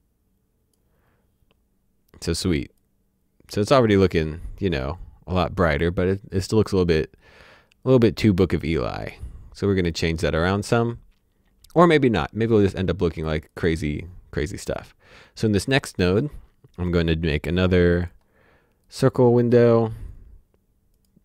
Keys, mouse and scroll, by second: 2.7 click, 12.4 click, 16.7 click, 20.9 click.